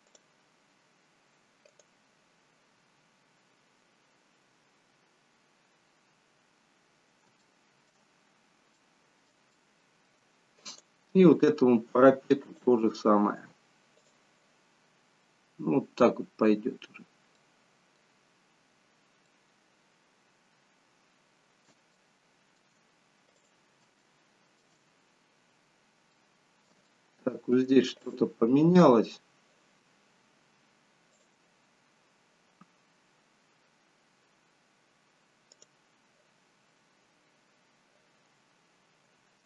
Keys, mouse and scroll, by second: 3.8-6.0 scroll up 1, 6.0-6.7 scroll down 7, 6.7 scroll down 1, 6.9 scroll up 1, 7.5 shift+middle click, 8.3-8.9 scroll up 1, 8.9 middle click, 8.9-9.7 scroll up 1, 9.7 shift+middle click, 10.8 click, 12.6 click, 18.2 middle click, 18.2-19.4 scroll down 7, 18.9-19.6 scroll up 2, 19.4 middle click, 23.5 click, 24.1 shift+middle click, 25.1-25.6 scroll up 4, 26.3 middle click, 27.0 shift+middle click, 28.2 click, 31.3 click.